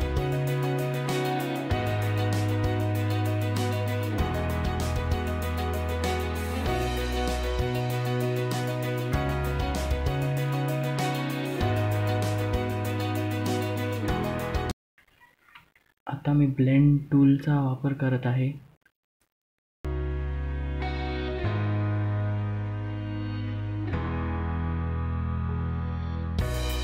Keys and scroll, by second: 9.4 F2, 21.3 F2.